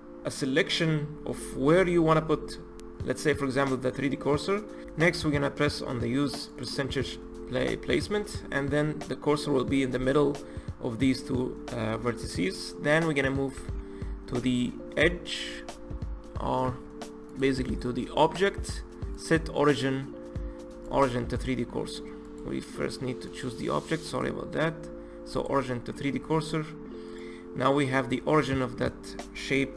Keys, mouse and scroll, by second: 6.5-9.5 drag, 13.5 Tab, 14.2 Tab, 16.6 Tab, 17.3 click, 17.7-20.6 drag, 22.2 click, 23.2-26.4 drag, 27.0 click.